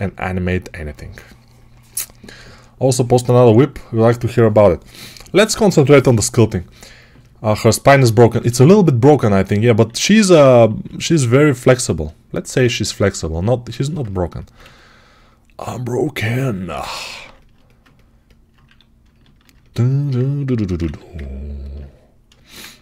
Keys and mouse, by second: 2.6-9.5 right drag, 9.8 alt+q, 10.6 g, 12.9-19.4 right drag, 14.5 2, 18.5 1, 21.0 ctrl+1.